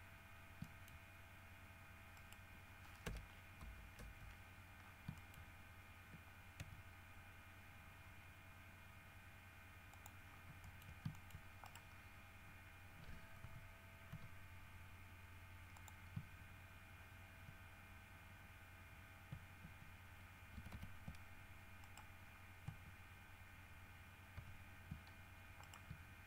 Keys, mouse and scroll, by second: 0.1-0.8 shift+scroll down 4, 0.8 shift+middle click, 1.4 shift+scroll up 2, 2.3 right click, 3.2 KP_Decimal, 3.9 KP_Decimal, 4.2 KP_3, 5.0-5.3 scroll down 3, 5.4 shift+middle click, 6.8 e, 10.1 middle click, 10.4 scroll up 2, 10.8 shift+middle click, 11.3 shift+middle click, 11.5 shift+scroll up 2, 11.8 shift+middle click, 12.1 shift+scroll up 2, 13.6 g, 14.3 g, 15.9 middle click, 20.8 ctrl+c, 22.0 right click, 24.6 ctrl+v, 25.8 shift+right click.